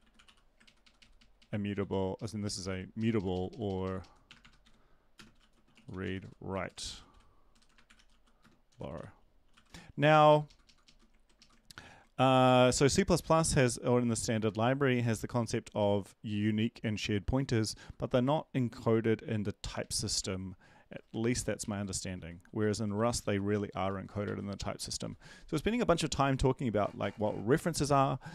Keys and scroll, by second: 0.0 Home, 0.0 ctrl+Right, 0.4-1.3 typing, 2.2 ctrl+Right, 2.2 End, 4.6 ctrl+shift+Left, 5.4-6.5 typing, 7.9-12.7 typing, 10.3 ctrl+shift+Left, 10.4 ctrl+shift+Left, 13.2 Up, 14.0 Right, 14.6 ctrl+v, 14.9 ctrl+Left, 15.1 ctrl+Left, 15.3 ctrl+Left, 15.8 Right, 17.7 Left, 19.6 Right, 20.9 _, 21.2 ctrl+shift+Right, 21.6 ctrl+shift+Right, 22.2-23.7 typing, 23.8 Down, 24.2 ctrl+s, 24.8 Down, 25.0 Down.